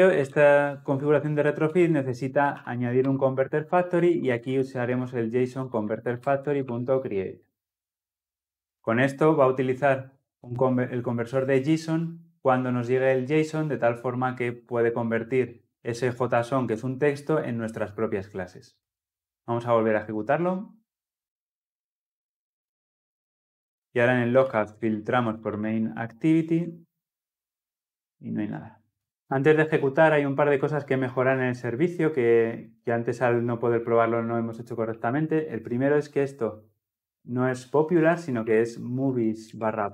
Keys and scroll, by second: 2.9 Return, 6.7 Return, 19.9 shift+F10.